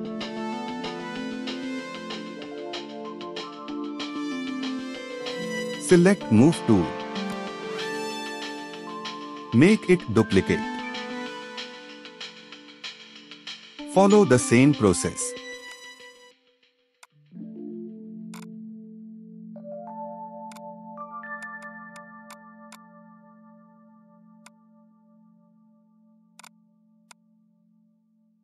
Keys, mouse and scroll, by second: 0.1 scroll down 1, 3.2 alt+scroll up 1, 10.1 alt+click, 12.7 ctrl+v, 16.3 scroll down 1, 17.0 alt+click, 18.4 double click, 19.2-20.4 typing, 19.7 Return, 20.5 double click, 23.1 scroll down 1, 23.7-24.3 scroll down 1, 25.7-26.4 scroll down 1, 26.4 double click.